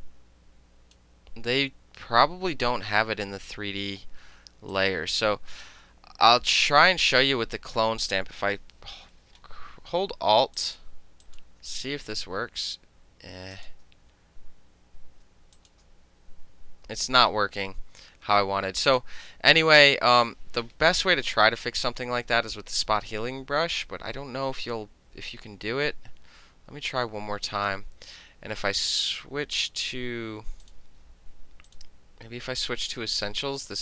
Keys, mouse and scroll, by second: 4.8-7.2 drag, 10.6 alt+click, 11.3 alt+click, 13.6 alt+click, 15.7 alt+click, 19.0 click, 21.2 middle click, 21.7-24.5 drag, 27.4 click, 30.7 click, 31.8 click.